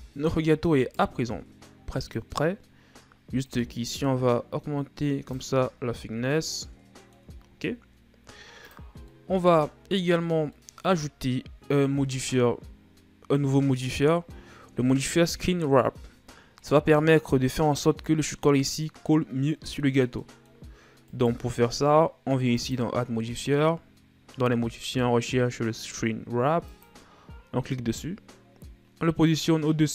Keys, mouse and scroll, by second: 0.4-1.1 shift+scroll up 3, 1.3 right click, 2.5-6.1 drag, 6.1-7.9 middle drag, 7.9-9.2 shift+scroll up 1, 9.2-9.6 drag, 9.6-10.1 middle drag, 10.1-11.0 shift+scroll up 4, 11.0-11.5 middle drag, 11.5-14.3 scroll up 1, 14.3 scroll down 1, 14.4-18.1 middle drag, 18.1-19.0 scroll up 2, 19.0-21.6 middle drag, 21.6 right click, 23.1-26.1 drag, 29.8-29.9 drag.